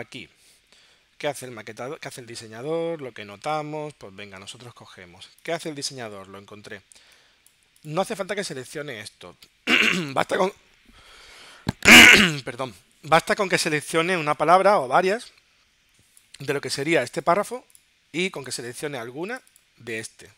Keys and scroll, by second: 3.4 super+Tab.